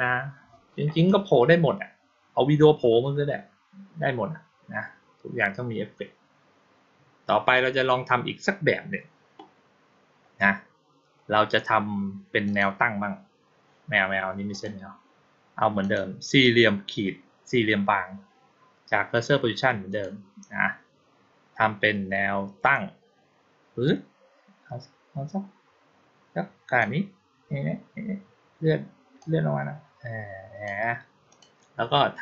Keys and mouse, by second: 12.3 click, 14.4 click, 15.7 click, 19.8 click, 22.6-26.6 drag, 29.0-30.5 drag, 31.2 click.